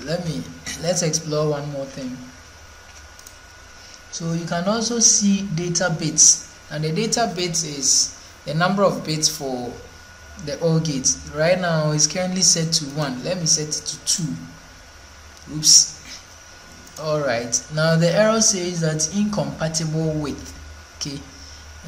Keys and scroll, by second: 0.0 ctrl+1, 2.6 ctrl+2.